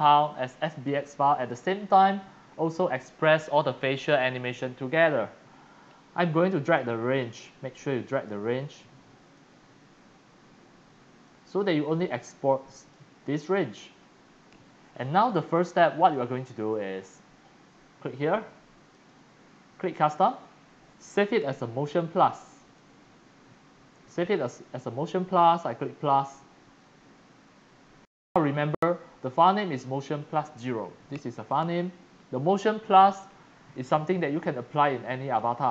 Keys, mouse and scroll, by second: 0.3-1.5 drag, 0.3-1.6 typing, 1.8-2.1 scroll down 7, 2.5-2.8 scroll down 2, 3.4 scroll, 5.1 scroll, 7.0-8.4 drag, 9.3-12.9 drag, 14.2 click, 15.1 click, 16.1 click, 16.1-16.9 typing, 18.9 click, 20.0 click, 22.6 click, 26.1 click, 31.3 click, 33.1-33.5 scroll, 33.7 scroll down 1, 33.8 scroll down 1, 33.9-35.7 typing, 34.1-35.4 drag.